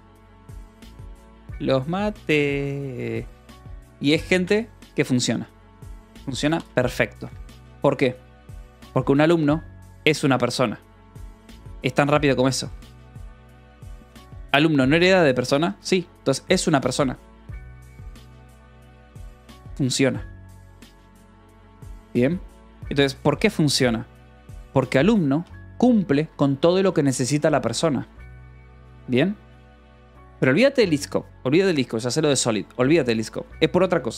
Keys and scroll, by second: 4.8 Escape, 6.9 shift+v, 7.1 Escape, 12.0-15.6 typing, 16.0 Escape, 18.1 shift+g, 22.8-23.7 typing, 24.8 k, 25.8 shift+v, 26.1 Escape, 26.2 k, 27.1 shift+v, 27.9 Escape.